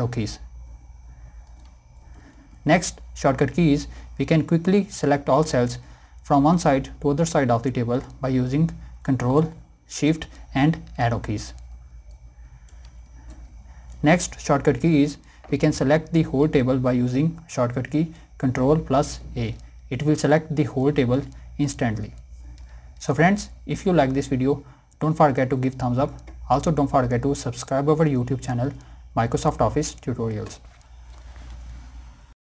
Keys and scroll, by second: 0.8 ctrl+Up, 1.9 ctrl+Down, 9.8 ctrl+shift+Down, 11.2 ctrl+shift+Right, 12.8 ctrl+shift+Up, 18.8 ctrl+a, 21.3 ctrl+a.